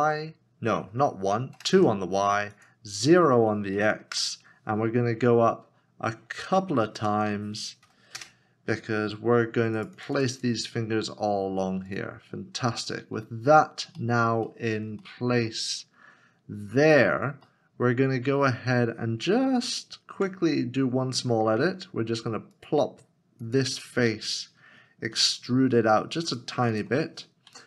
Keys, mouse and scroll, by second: 1.6 BackSpace, 1.7 2, 3.7 KP_Decimal, 4.1 Return, 5.8 scroll down 1, 7.8 KP_0, 8.2 Return, 14.0 middle click, 14.5 shift+middle click, 15.2 middle click, 15.9-16.7 scroll down 1, 16.7-17.4 scroll up 1, 17.5 middle click, 20.7 scroll up 1, 25.1 e, 27.5 Tab.